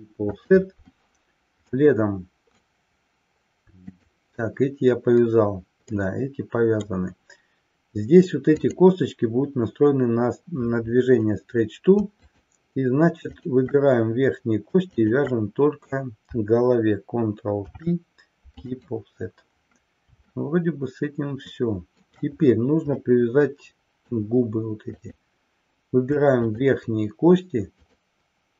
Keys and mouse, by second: 1.8-2.8 middle drag, 3.9 click, 5.9-7.2 middle drag, 8.5 click, 13.5 shift+click, 15.0 shift+click, 17.5 ctrl+p, 20.5-22.3 shift+middle drag, 23.2-24.3 middle drag, 25.0 click, 26.5 shift+click, 27.8 shift+click.